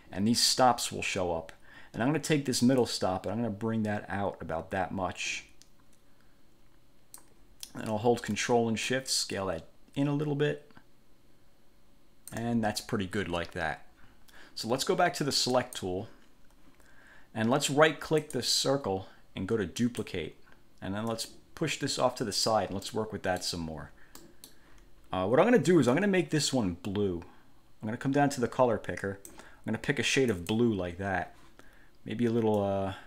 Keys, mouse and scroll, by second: 3.0-7.5 drag, 9.1-12.7 ctrl+shift+drag, 15.7 click, 18.4 click, 19.9 click, 21.3-22.8 drag, 23.0 middle click, 24.3 middle click, 26.1-29.7 drag, 30.5 click, 32.7-33.0 drag.